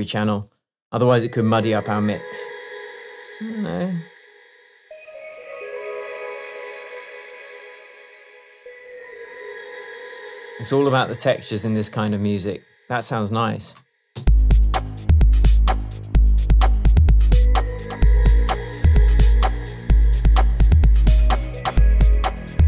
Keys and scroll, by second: 10.3 super+d, 11.0 super+space, 14.3 space.